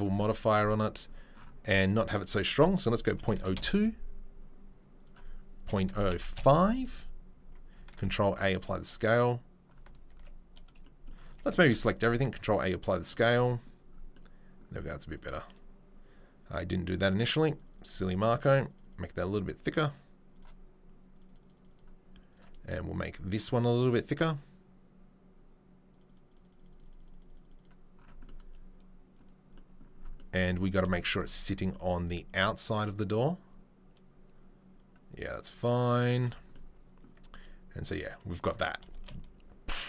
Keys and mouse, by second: 0.0 click, 0.5-0.9 shift+right drag, 0.9-7.7 drag, 6.0 KP_0, 7.9 ctrl+a, 10.1 ctrl+z, 11.3 a, 11.9 ctrl+a, 14.3-15.1 drag, 15.1-17.3 middle drag, 17.3-20.4 drag, 20.4-21.2 middle drag, 21.2-22.3 drag, 22.3-25.9 middle drag, 25.9-30.8 drag, 30.8-31.2 shift+right drag, 38.9 shift+space.